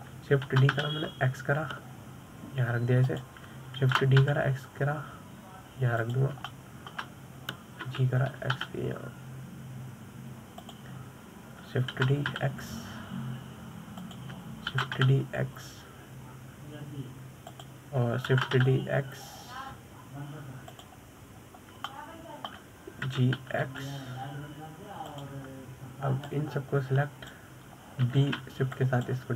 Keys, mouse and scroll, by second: 0.5-1.0 shift+middle drag, 1.0-2.0 scroll up 3, 2.0 shift+d, 5.4 shift+d, 8.0-9.3 shift+middle drag, 9.3 g, 13.5 shift+d, 16.3 shift+d, 19.8 shift+d, 22.9-23.4 scroll down 1, 23.4-24.6 shift+middle drag, 24.6 g, 27.7 drag.